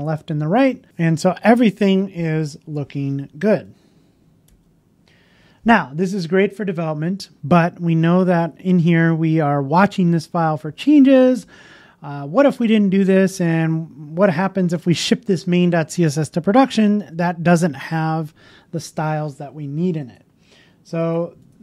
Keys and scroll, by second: 3.6 super+Tab.